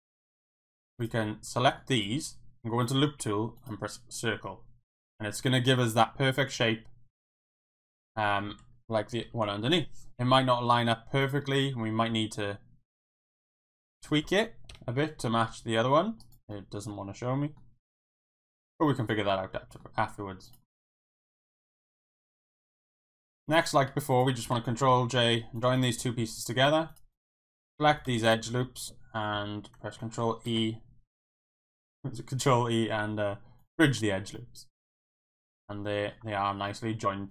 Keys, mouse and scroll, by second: 0.5 click, 1.6 middle click, 1.9-3.7 right drag, 4.2-7.3 middle drag, 7.9 middle click, 9.2 ctrl+KP_7, 11.3 click, 12.1 s, 13.4 middle click, 14.7 KP_7, 15.5 s, 16.2 right click, 16.7 middle click, 17.8 s, 18.7 click, 19.0 scroll up 1, 19.1 middle click, 19.8 scroll down 1, 20.5 click, 20.5 s, 20.6 scroll up 1, 20.7 middle click, 22.2 middle click, 22.4 scroll down 1, 22.6 shift+scroll up 1, 22.7 shift+middle click, 22.7 shift+scroll down 1, 22.8 scroll up 1, 23.4 Tab, 24.9 ctrl+j, 26.0 Tab, 26.9 click, 27.6 alt+click, 28.3 alt+shift+click, 30.4 ctrl+shift+e, 32.4 ctrl+e, 33.9 click, 34.5-36.1 middle drag, 36.3 Tab, 36.7-37.3 middle drag.